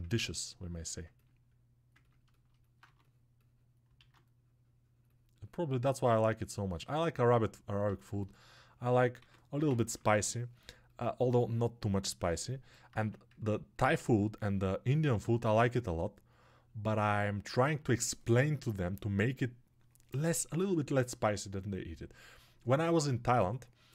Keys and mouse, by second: 3.8 alt+2.